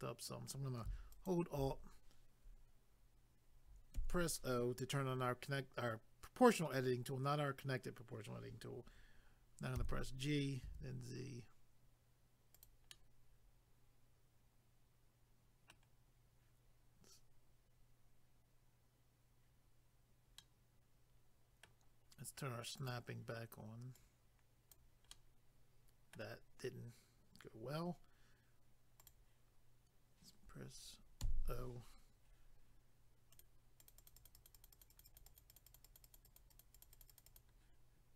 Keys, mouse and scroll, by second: 1.1 alt+click, 1.3 alt+click, 12.6 click, 12.7 click, 12.9 middle click, 20.4 middle click, 22.8 click, 22.9 click, 24.0 click, 25.1 middle click, 29.0 click, 29.1 click, 33.3 click, 33.4 click, 33.8 click, 33.9 click, 34.0 click, 34.1 double click, 34.2 click, 34.3 click, 34.3 click, 34.5 double click, 34.6 click, 34.7 click, 34.7 click, 34.8 double click, 34.9 click, 35.0 click, 35.2 double click, 35.3 click, 35.4 click, 35.5 click, 35.6 double click, 35.7 click, 35.8 click, 35.8 click, 36.0 double click, 36.0 click, 36.2 click, 36.2 click, 36.4 double click, 36.5 click, 36.6 click, 36.8 click, 36.8 double click, 36.9 click, 37.0 click, 37.1 click, 37.2 double click, 37.3 click, 37.4 click.